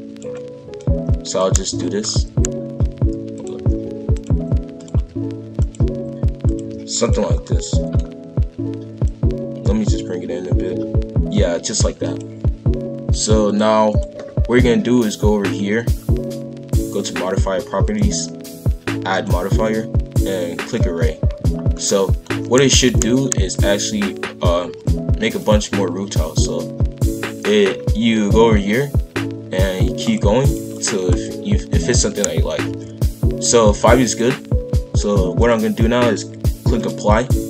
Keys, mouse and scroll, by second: 0.8 click, 1.6-6.6 typing, 1.9-2.3 scroll up 2, 7.3 scroll down 1, 7.4-9.0 middle drag, 9.0 click, 13.4-16.6 drag, 17.8 click, 20.7-21.5 drag, 21.5 scroll down 1, 21.7-22.6 middle drag, 22.6 shift+f, 30.0-31.8 drag, 31.8 shift+f, 35.4-37.4 drag.